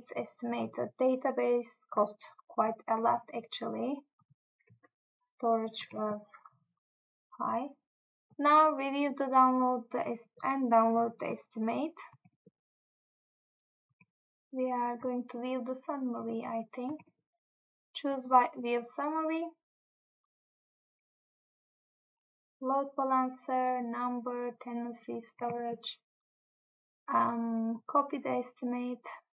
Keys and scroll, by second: 5.9 Tab, 12.3 Tab, 15.0 Tab, 17.0 Tab, 25.5 Tab.